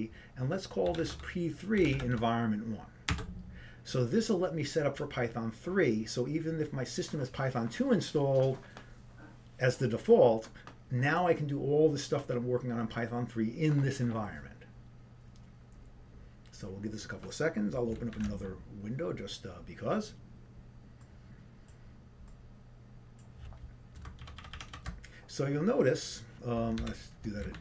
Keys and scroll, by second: 4.3-5.1 typing.